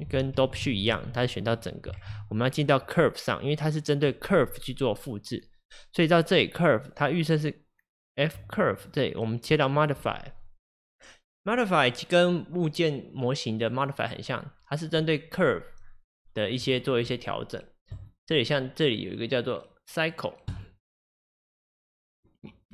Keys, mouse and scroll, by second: 0.7 ctrl+Tab, 2.1 ctrl+Tab, 2.6 click, 9.9-22.7 drag.